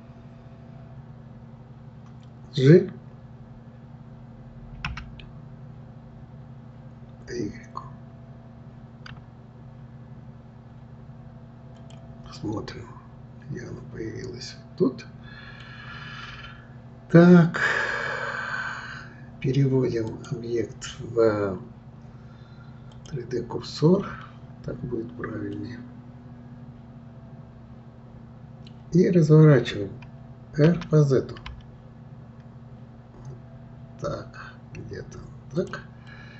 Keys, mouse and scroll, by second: 12.4-15.4 middle drag, 20.1-23.1 drag, 24.8-25.5 scroll down 2, 25.5-28.5 middle drag, 28.6-29.8 middle drag, 30.7 r, 36.1-36.3 middle drag.